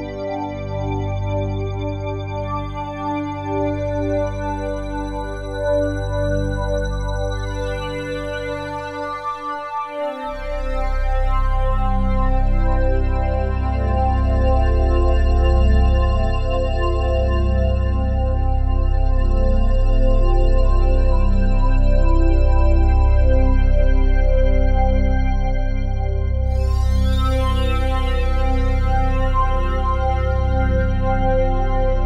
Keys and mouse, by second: 0.0-1.8 typing, 2.9 click, 3.6 space, 5.7-6.2 typing, 6.8 ctrl+s, 12.1 shift+click, 12.8 shift+click, 13.4 shift+click, 14.1 shift+click, 16.1-17.1 drag, 17.5 shift+click, 18.1 shift+click, 19.3-20.6 drag, 21.3 click, 23.1 i, 24.9-25.9 drag, 27.2 ctrl+s, 28.3-30.6 drag, 31.9 r.